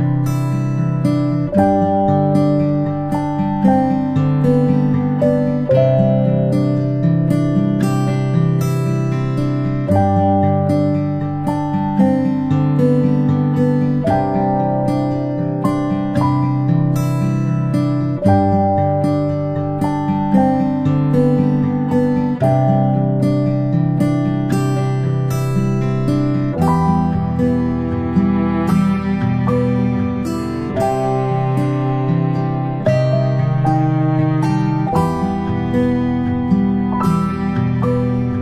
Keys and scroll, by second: 3.0 ctrl+[, 16.7-17.1 ctrl+space, 17.7 p, 26.3 ctrl+space, 26.5 ctrl+space, 27.8 ctrl+space, 28.1 ctrl+space.